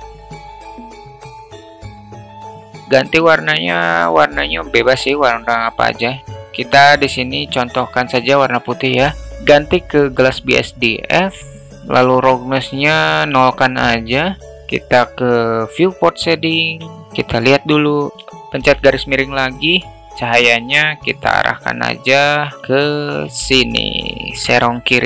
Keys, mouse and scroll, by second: 2.0 drag, 16.5-17.0 middle drag, 18.4 /, 19.3 alt+middle drag, 20.0 alt+middle drag, 22.8 shift+t, 24.5 alt+middle click.